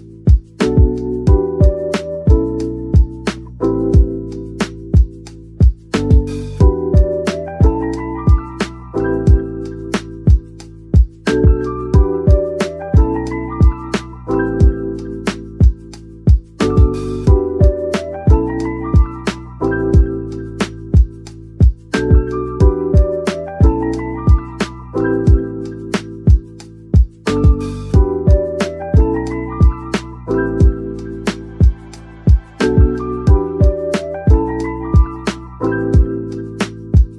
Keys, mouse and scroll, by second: 1.7-2.2 scroll up 1, 2.2 middle click, 3.6 scroll up 1, 4.1 middle click, 4.9 3, 8.8 middle click, 10.7 shift+click, 12.0 middle click, 15.4 shift+click, 17.5 shift+click, 19.5 scroll down 1, 19.8 middle click, 20.8 typing, 23.0 right click, 23.8-24.2 typing, 27.9 scroll down 1, 28.4 middle click, 29.6 Tab, 30.1 middle click, 32.8 middle click, 34.2-34.9 scroll up 1, 35.0 a.